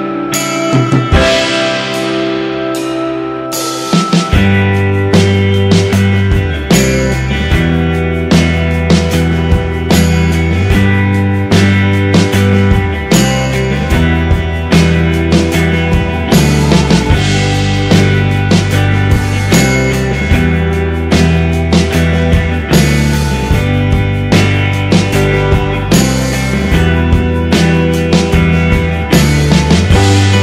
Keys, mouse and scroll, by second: 3.9 g, 6.8 g, 8.1 g, 11.3 ctrl+z, 11.9 ctrl+z, 14.1 g, 19.7-20.8 middle drag, 25.7-27.4 middle drag, 27.4 right click, 28.3 g.